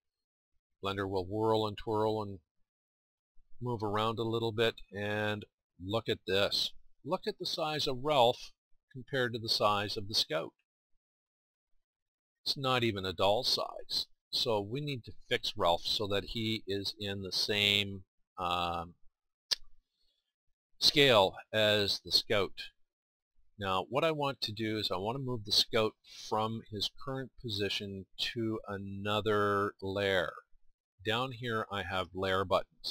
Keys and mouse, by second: 5.7 middle click, 7.7 middle click, 7.9-17.5 middle drag, 18.1-21.7 middle drag, 27.7-32.9 middle drag.